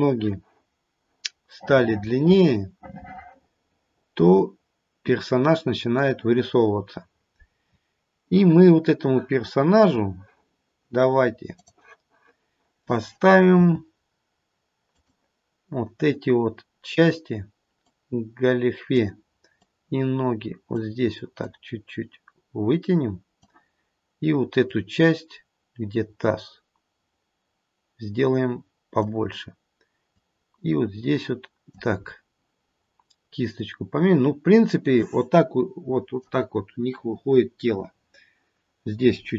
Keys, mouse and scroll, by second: 1.5 middle click, 3.8 middle click, 6.4-7.9 scroll up 2, 7.9-9.3 scroll down 1, 11.7 click, 13.5 f, 17.9 click, 19.6 click, 21.4 click, 24.7 click, 30.0 click, 32.0-33.1 scroll up 1, 33.1-33.5 scroll up 3, 33.5 click.